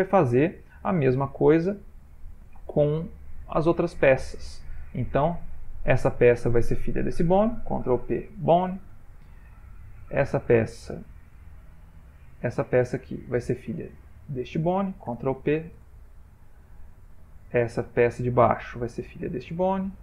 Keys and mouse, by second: 5.2 click, 6.6 shift+click, 7.9 ctrl+p, 9.9 click, 11.2 middle click, 11.5 middle click, 12.3 click, 13.7 shift+click, 15.2 ctrl+p, 17.6 click, 18.3 middle click, 19.3 shift+click.